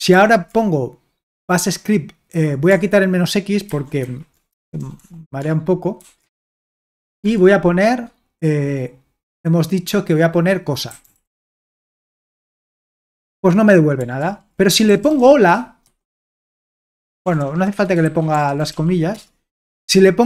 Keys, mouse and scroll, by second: 0.1 ctrl+p, 3.7 alt+b, 4.0 alt+b, 4.6 BackSpace, 4.8 BackSpace, 5.0 BackSpace, 6.0 alt+f, 7.2 alt+f, 10.7-11.7 typing, 12.8 Return, 14.2 ctrl+p, 14.7-19.2 typing.